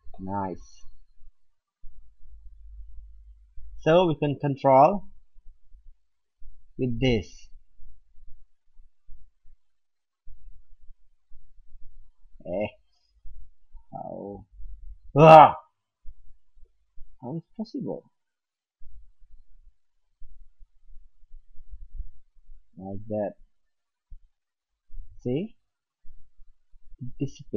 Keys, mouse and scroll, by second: 0.1 middle click, 0.5 middle click, 1.3 middle click, 1.5 middle click, 7.9-9.7 drag, 10.6-17.1 drag, 17.1-17.9 middle drag, 17.9 click, 19.3 click, 21.1-23.1 drag, 26.3 middle click, 26.7 middle click, 27.0 middle click.